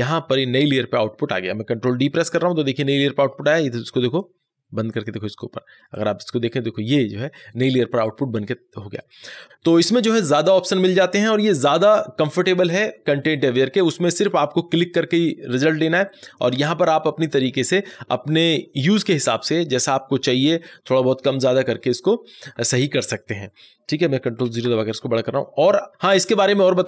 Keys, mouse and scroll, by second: 1.7 click, 2.2 ctrl+d, 4.1 click, 6.0 click, 25.8 click.